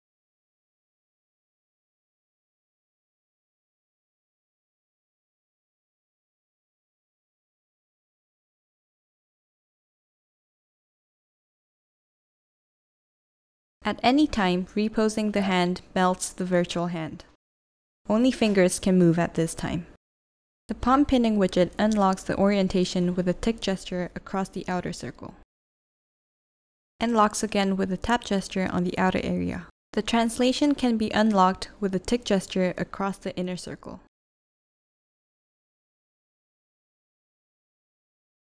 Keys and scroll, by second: 12.7-13.4 typing.